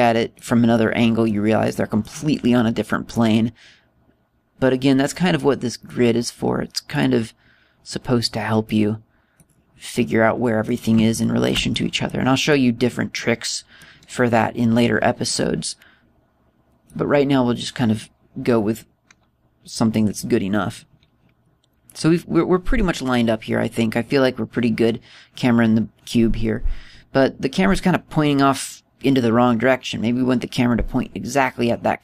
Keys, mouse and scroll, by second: 1.5 middle click, 2.4 middle click, 3.9 click, 7.7 right click, 9.4 click, 10.7 middle click, 11.9 shift+middle click, 12.5 middle click, 13.2 middle click, 13.9 middle click, 16.0 click.